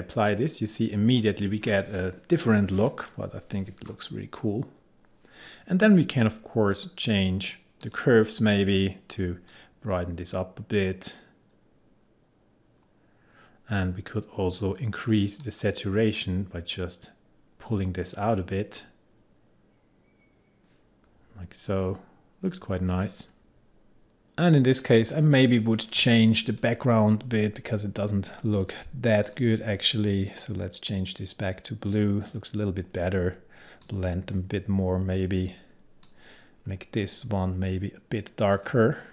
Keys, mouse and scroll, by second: 3.9 scroll up 1, 7.9-13.5 drag, 15.5-21.1 drag, 21.1-22.9 scroll down 1, 24.0-25.0 scroll down 1, 26.6 click, 33.9-39.1 drag.